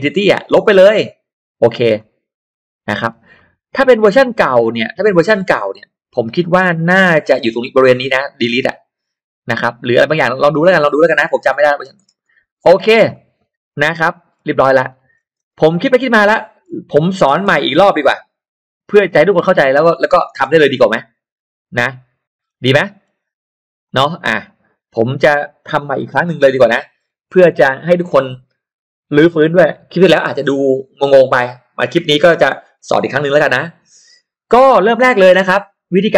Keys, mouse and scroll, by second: 1.9 click, 2.9-3.3 scroll down 2, 3.3 middle click, 4.1 scroll down 2, 5.2-5.6 scroll up 2, 6.0 scroll up 2, 11.3 scroll down 2, 11.5 middle click, 11.9-12.5 scroll up 2, 12.9-13.6 scroll down 3, 13.1 middle click, 13.6-14.3 scroll up 2, 14.1 middle click, 14.3-14.7 scroll down 2, 14.9 middle click, 15.5 space, 15.6 click, 16.3 middle click, 16.6-16.9 scroll down 1, 17.4 m, 17.7 click, 19.5 click, 19.9 click, 19.9 space, 20.2 middle click, 20.2-20.9 scroll up 4, 21.9 click, 22.2-22.7 scroll down 2, 22.7 middle click, 23.9-25.0 drag, 26.3 Delete, 26.7 middle click, 27.0 scroll down 1, 34.9-35.3 scroll up 1, 35.1 middle click, 35.3-36.1 scroll down 2.